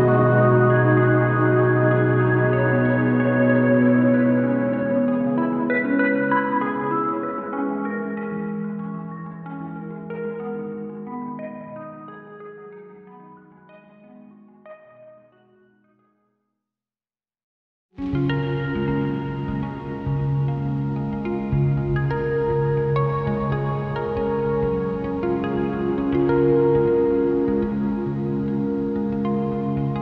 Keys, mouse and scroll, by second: 1.0 click, 2.1 g, 2.4 click, 3.0 s, 3.1 right click, 3.3 a, 3.5 s, 4.1 right click, 5.3 click, 6.6 a, 6.9 s, 7.1 right click, 8.1 s, 10.9 click, 11.0 Tab, 11.1 scroll up 1, 11.7 Tab, 12.0 click, 13.1 g, 14.1 click, 14.5 g, 15.3 click, 15.9 g, 16.1 click, 17.0 g, 17.1 click, 17.3 g, 18.9 click, 19.1 g, 19.9 click, 20.1 g, 20.9 click, 21.1 g, 22.3 click, 22.4 g, 23.1 click, 24.0 g, 24.1 click, 24.8 Tab, 24.9-25.4 scroll down 2, 25.7-26.7 scroll down 1, 26.7 Tab, 26.9 KP_Decimal, 27.1 scroll down 1, 27.3 u, 27.8 a, 28.1 g, 28.7 click, 28.9 right click, 29.5 s.